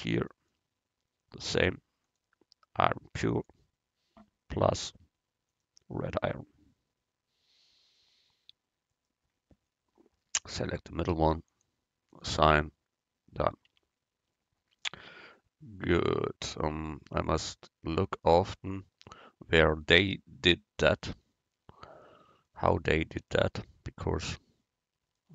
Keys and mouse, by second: 2.9-4.0 drag, 4.6-7.4 drag, 9.9-10.9 drag, 11.6-13.8 drag, 13.8 Tab.